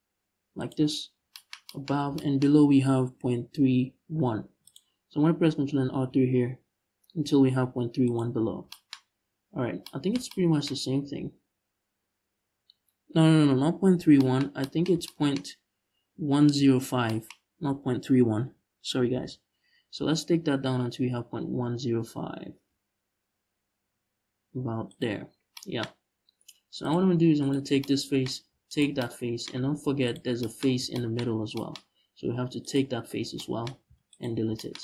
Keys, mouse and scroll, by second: 0.3 shift+click, 0.7 scroll down 1, 3.4-4.1 scroll up 1, 4.1 ctrl+r, 7.8 shift+click, 8.1 scroll down 1, 9.3 scroll down 2, 16.3-16.7 scroll up 2, 17.1-18.3 scroll up 2, 18.3-18.7 scroll up 1, 18.7 g, 24.6 shift+click, 25.0 scroll down 1, 26.5 click, 27.1 right click, 28.4 shift+right click, 29.2 x, 30.3-30.6 scroll up 1, 30.9-31.2 scroll up 1, 32.3 right click, 32.9 scroll down 1, 33.5 x.